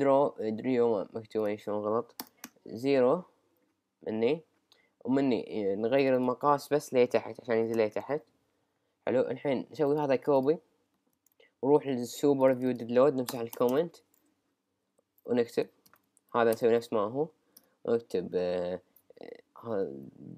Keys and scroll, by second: 7.6 typing, 9.0 typing, 11.1 super+c, 13.7 Return, 14.7 Up, 15.2 Return, 15.9 super+v, 16.5 Return, 19.2 d.